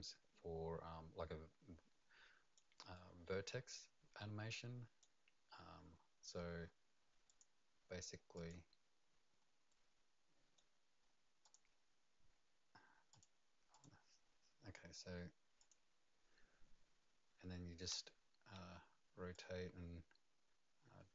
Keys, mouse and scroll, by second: 2.5 click, 2.5 right click, 2.9 right click, 7.2 click, 8.3 click, 9.7 right click, 11.4 click, 13.1 click, 13.7 click, 15.6 click, 19.3 click.